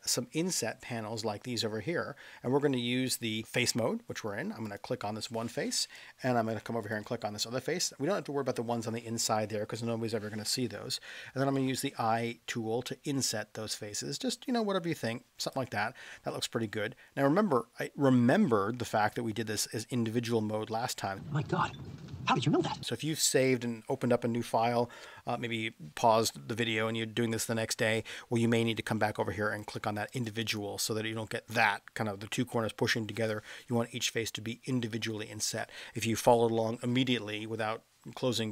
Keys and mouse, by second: 4.6 click, 11.3 i, 29.5 click, 30.1 click, 30.4 click, 33.1 click.